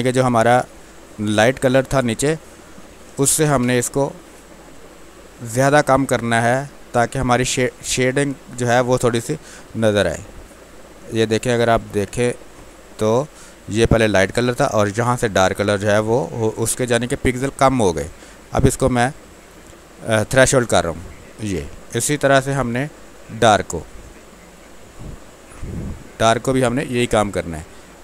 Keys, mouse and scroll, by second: 2.1 ctrl+m, 4.0-6.1 drag, 6.1-8.0 drag, 9.8 space, 10.4-15.4 ctrl+drag, 15.4 alt+click, 16.5-18.4 drag, 18.4 F12, 20.4-22.2 drag, 24.3 space, 24.8 click, 24.9 space, 26.6 click.